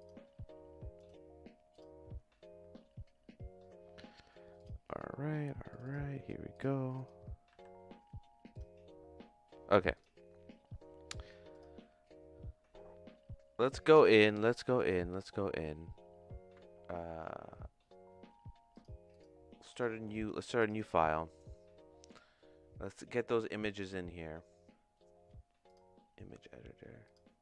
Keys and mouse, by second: 14.8 click, 18.8-20.7 drag, 22.3-25.9 drag.